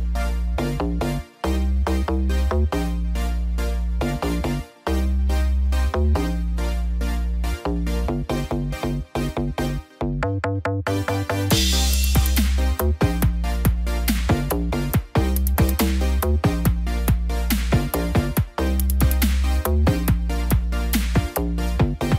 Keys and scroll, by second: 17.8 ctrl+=.